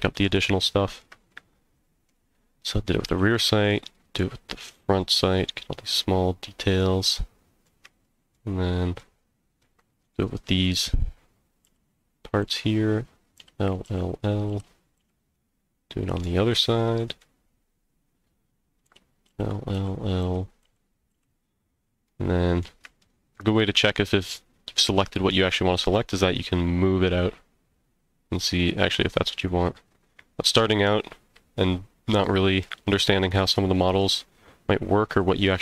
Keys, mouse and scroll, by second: 0.6 shift+middle click, 1.3 middle click, 3.1 l, 3.7 middle click, 5.1 l, 5.5-7.6 middle drag, 8.0 shift+middle click, 8.6 shift+middle click, 9.2 scroll up 2, 9.6 middle click, 11.6-15.0 typing, 15.3 middle click, 16.5 scroll up 1, 16.8 middle click, 18.9-21.1 typing, 21.5-21.9 scroll down 2, 22.0 middle click, 23.0 shift+middle click, 23.6 scroll down 1, 23.9 middle click, 24.4 scroll down 1, 24.8 middle click, 25.9 g, 32.2 right click, 32.6 middle click, 33.3 shift+middle click, 34.0-35.6 middle drag.